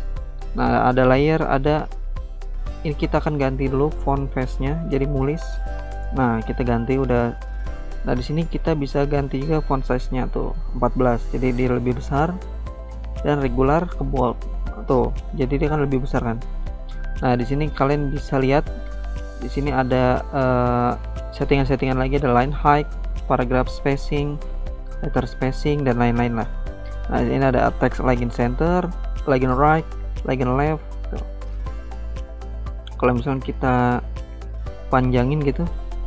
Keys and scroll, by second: 3.6-4.9 typing, 5.3 Return, 19.6 ctrl+z.